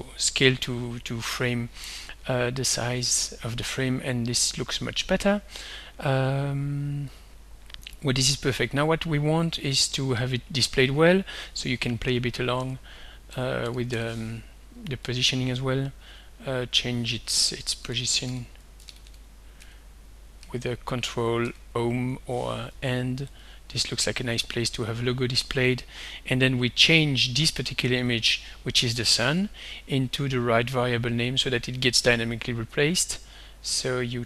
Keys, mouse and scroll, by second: 7.1-8.4 drag, 9.8 click, 10.9 click, 12.1 ctrl+d, 12.6 ctrl+Page_Down, 13.3 ctrl+End, 15.1 click, 16.0 click, 17.4 ctrl+End, 17.8 ctrl+End, 18.9 ctrl+End, 19.6 ctrl+Home, 20.4 ctrl+Home, 21.4 ctrl+End, 23.4 click, 32.4 right click.